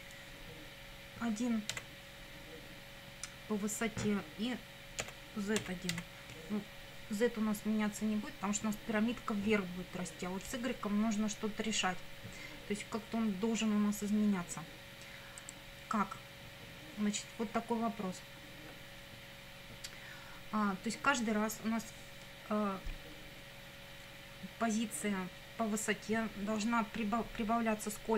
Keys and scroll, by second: 1.7 1, 5.0 ,, 5.6 z, 5.9 1.